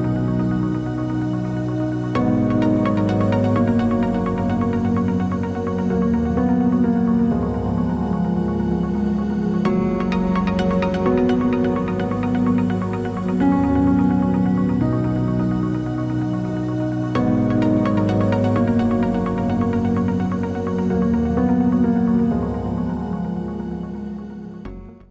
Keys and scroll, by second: 11.7 ctrl+z.